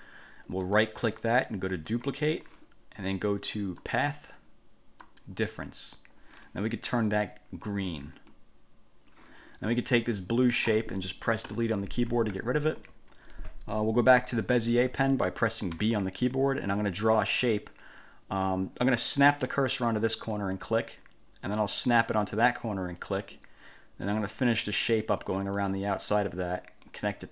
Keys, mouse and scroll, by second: 0.8 click, 2.1 click, 4.0 click, 5.2 click, 8.4 click, 10.3-11.0 drag, 11.6 Delete, 15.9 b, 20.7 click, 23.2 click, 24.2 click, 25.0 click.